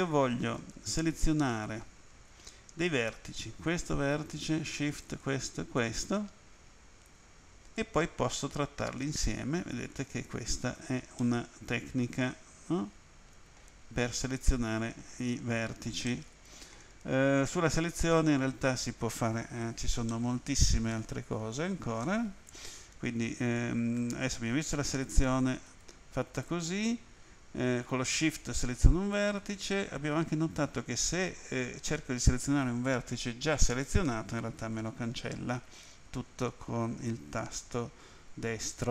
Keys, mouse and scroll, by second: 1.3 click, 2.9 right click, 4.9 shift+right click, 5.8 shift+right click, 7.8 click, 11.2 middle click, 15.1-15.6 scroll up 3, 15.6-16.1 scroll down 1, 16.1 middle click, 20.1 middle click, 23.6 alt+click, 24.7 right click, 25.7 right click, 28.1 shift+right click, 33.6 shift+right click, 34.6 shift+right click.